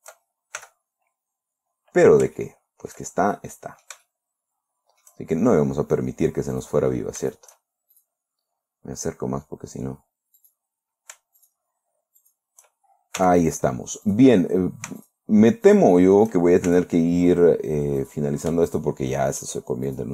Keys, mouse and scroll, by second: 1.0 f, 1.9-2.6 scroll down 4, 2.8 shift+middle click, 3.8-5.7 shift+middle drag, 5.8 shift+scroll up 1, 7.0 right click, 7.7 shift+right click, 8.4 shift+right click, 8.9-9.9 shift+scroll up 2, 9.9 scroll down 1, 10.8 right click, 11.9 shift+right click, 12.7 shift+right click, 13.6 f, 14.6 right click, 15.5 shift+right click, 16.2 shift+right click, 17.2 shift+f, 18.5 right click, 19.2 shift+right click.